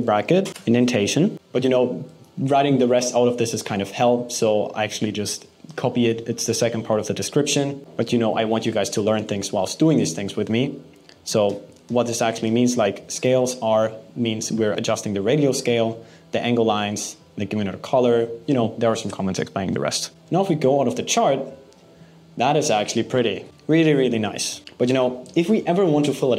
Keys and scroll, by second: 1.3 BackSpace, 8.9 super+v.